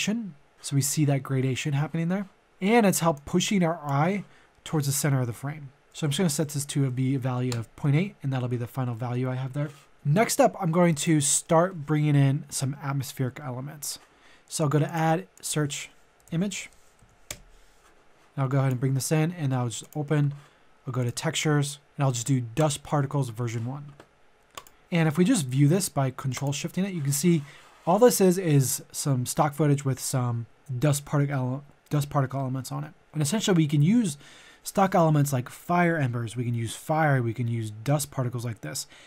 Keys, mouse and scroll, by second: 6.3 KP_Decimal, 6.6 KP_8, 8.9 middle click, 9.2 scroll down 1, 9.9 middle click, 10.1 click, 11.3 middle click, 14.8 click, 16.2-17.4 typing, 18.2 click, 18.9 middle click, 19.8 click, 22.7 click, 24.9 middle click, 26.4 ctrl+shift+click.